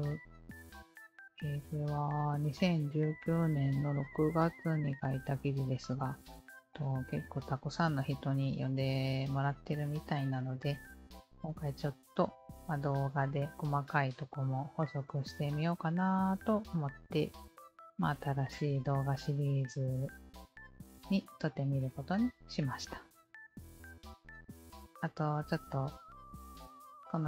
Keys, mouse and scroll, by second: 1.1-3.1 scroll up 2, 4.7-6.2 scroll down 1, 8.6-10.0 scroll down 1, 10.0-10.5 scroll down 2, 10.5-12.4 scroll up 1, 12.4-13.7 scroll up 2, 13.7 scroll down 1, 14.0-15.2 scroll down 1, 16.4-17.9 scroll down 1, 19.4-20.7 scroll down 2, 20.7-21.4 scroll up 1, 21.4-22.5 scroll up 1, 22.5-24.0 scroll up 2.